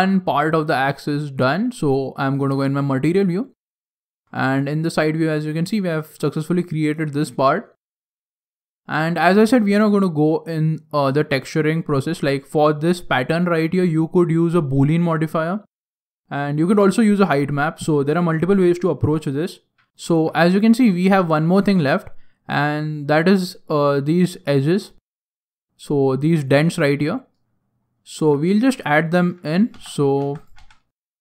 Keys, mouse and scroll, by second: 2.3 click, 2.9-3.3 scroll up 5, 3.3 shift+middle click, 4.0 KP_3, 4.7-5.3 scroll up 1, 5.3 right click, 5.3-6.0 scroll down 3, 6.0 right click, 19.9 middle click, 19.9 scroll down 3, 20.1 shift+middle click, 20.5 middle click, 21.0 shift+middle click, 21.5 scroll up 1, 21.6 scroll down 1, 27.4-27.9 scroll down 8, 28.0 shift+middle click, 28.5 scroll down 1, 28.6 middle click, 29.0 shift+middle click, 29.5 right click, 29.7 Tab, 30.2 Tab, 30.4 right click, 30.6 Tab.